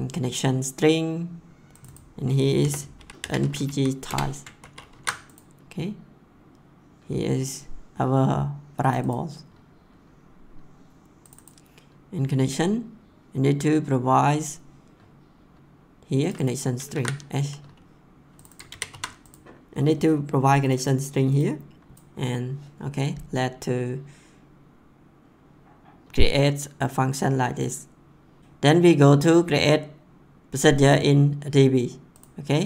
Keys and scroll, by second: 2.6-4.1 typing, 4.6 ctrl+s, 16.9 ctrl+c, 18.6 ctrl+v, 18.8 ctrl+s, 21.9 ctrl+s.